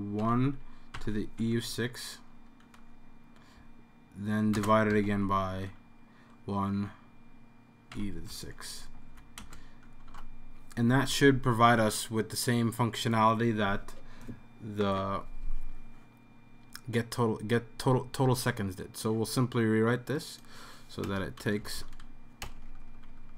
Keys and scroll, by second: 0.2-1.9 typing, 2.7 End, 4.6-5.5 typing, 7.9-8.3 typing, 8.8 Left, 8.9 Left, 9.1 Left, 10.0-10.8 typing, 21.1 BackSpace, 21.6 Right, 21.8 Right, 22.4-23.3 typing.